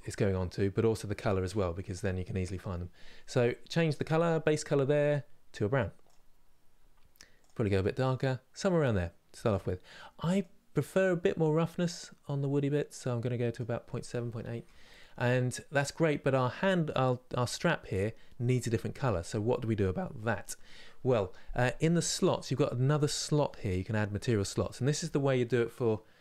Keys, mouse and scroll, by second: 10.7-15.0 drag, 15.0-22.0 middle drag, 22.0-26.2 drag.